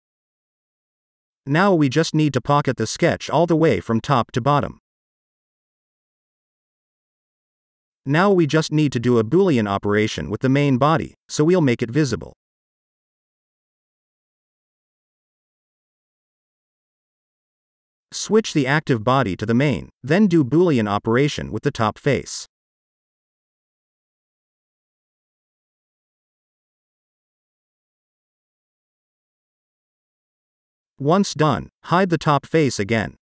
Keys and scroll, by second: 8.1 ctrl+s, 11.7 space, 31.7 space, 33.2 0.